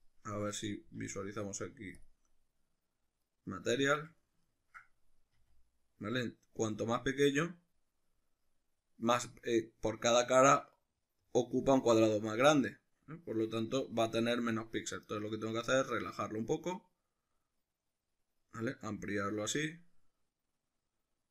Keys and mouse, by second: 0.0 right click, 0.6-21.3 middle drag, 0.9 z, 5.4 s.